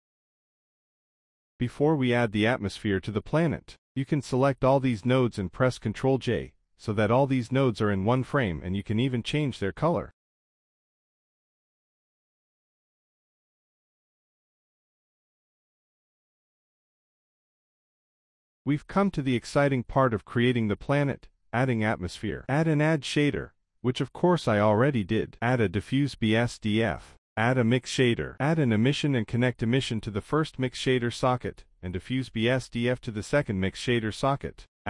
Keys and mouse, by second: 1.3 middle click, 1.5 middle click, 2.8 click, 3.4-3.9 drag, 4.7 ctrl+j, 5.5 click, 6.8 click, 7.5 click, 8.2-12.9 drag, 13.9 click, 14.4 drag, 14.9 click, 17.2 middle click, 18.1 click, 18.4 middle click, 19.2 shift+a, 21.1 middle click, 21.9 shift+a, 25.1 middle click, 26.0 click, 27.0 click, 27.4 shift+a, 29.2 click, 29.9-30.5 drag, 31.2-31.9 drag, 32.3 drag, 32.7 click, 33.4 click, 34.0 click, 34.4 shift+a.